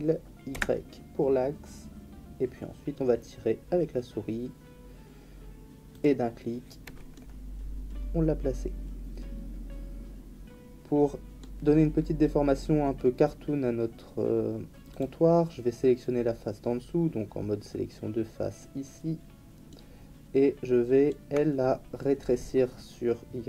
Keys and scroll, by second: 0.5 y.